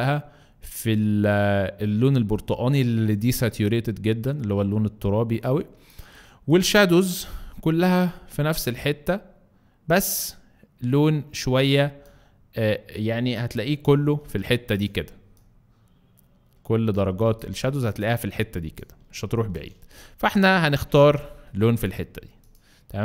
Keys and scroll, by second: 19.3 Escape.